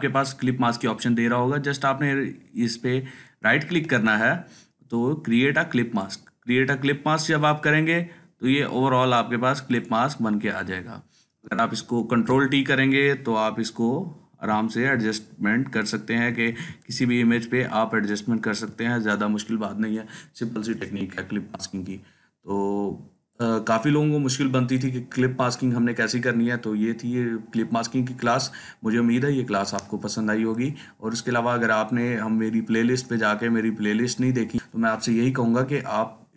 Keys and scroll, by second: 12.0 ctrl+t, 13.4-14.3 Down, 17.7-18.4 Up.